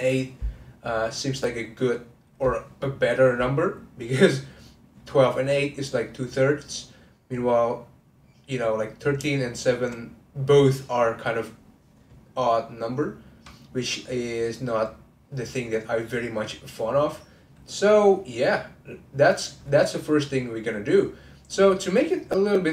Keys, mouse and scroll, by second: 4.1-7.1 middle drag, 9.4 shift+click, 13.0-16.0 middle drag, 18.5-22.7 middle drag.